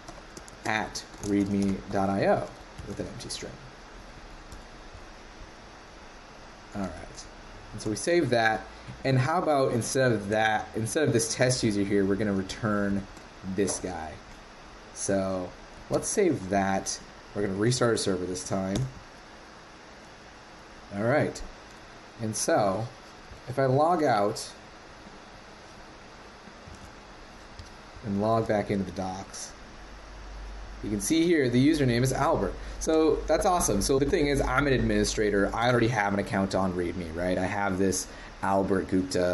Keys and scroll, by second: 10.3 super+c, 12.5 shift+super+Right, 13.8 super+v, 15.9 super+s, 17.6 ctrl+c, 22.6 super+Tab, 26.7 super+w.